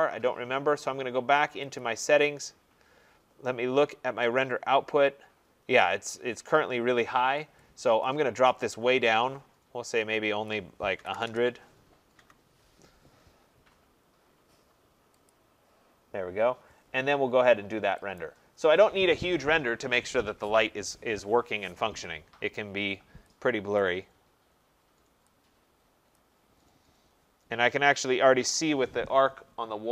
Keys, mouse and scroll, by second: 1.8 click, 4.4 click, 8.0 click, 10.7-11.6 typing, 12.2 Tab, 15.3 click, 18.2 click, 23.8 click, 26.2 click, 26.9 middle click.